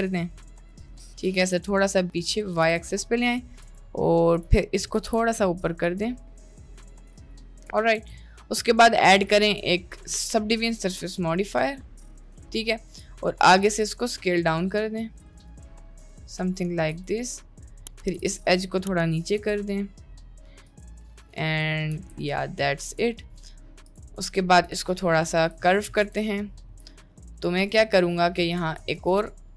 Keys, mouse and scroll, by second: 0.5 ctrl+r, 1.3 g, 2.7 g, 4.4 click, 4.8 middle click, 5.0 g, 6.6 g, 7.2 g, 7.5 middle click, 8.1 Tab, 8.3 middle click, 9.3-10.7 drag, 11.6 click, 12.5 Tab, 12.5 middle click, 13.2 click, 13.7 s, 15.4 Tab, 15.5 middle click, 16.0 Tab, 16.7 2, 16.9 click, 17.7 middle click, 18.1 g, 19.4 Tab, 19.7-20.5 middle drag, 20.8 drag, 21.5 middle drag, 21.9 s, 23.9 click, 24.3-24.9 shift+middle drag, 25.2-25.6 shift+middle drag, 26.1 Tab, 26.5 shift+middle click, 28.6 ctrl+r.